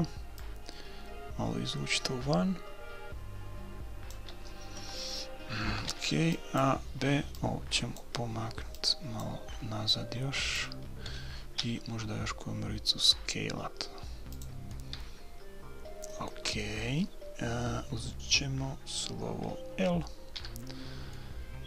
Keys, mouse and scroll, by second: 0.4-2.2 drag, 5.6 a, 6.0 b, 7.3-11.8 drag, 11.7 s, 14.7-16.5 middle drag, 16.7 middle click, 21.2-21.6 middle drag.